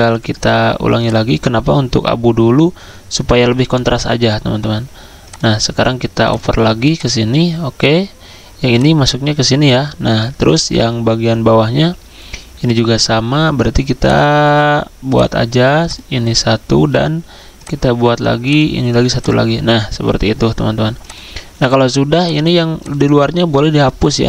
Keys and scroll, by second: 24.1 z.